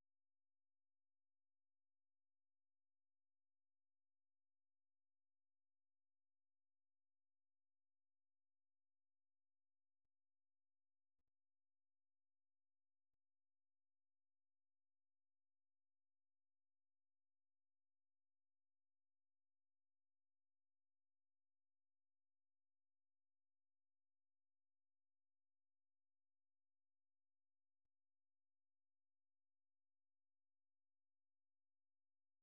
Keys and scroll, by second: 14.2 d, 15.4 typing, 16.4 typing, 17.8 d, 18.9 d, 20.2-23.8 typing.